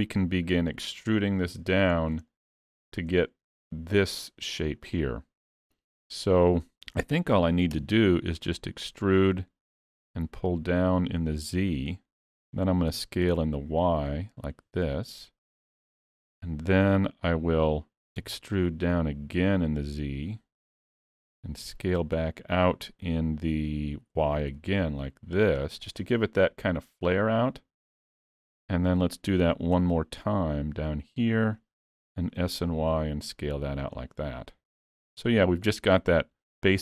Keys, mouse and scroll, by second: 1.2 scroll down 2, 2.0 scroll down 1, 2.3 shift+middle click, 2.7-3.1 scroll up 2, 3.2 shift+middle click, 5.0 middle click, 7.3 e, 9.2 click, 11.6 middle click, 12.9 s, 15.9 shift+middle click, 18.2 e, 21.7 s, 24.1 s, 27.9 middle click, 29.8 e, 32.0 s, 34.4 scroll down 1, 35.1 Tab, 35.3 middle click.